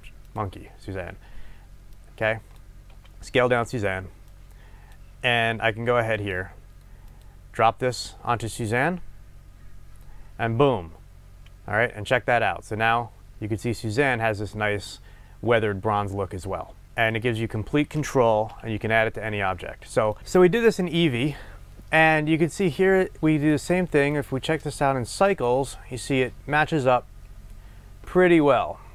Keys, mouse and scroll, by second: 2.9 s, 4.3-16.9 drag, 13.0 scroll, 16.9-20.1 middle drag, 18.6 Delete, 20.1-21.4 drag, 23.5 click, 24.0-28.9 drag.